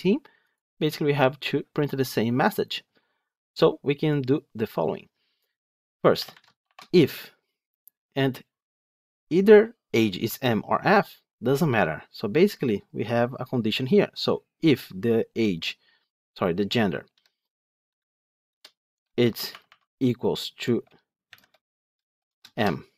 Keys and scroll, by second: 18.4 Return, 22.5 Return.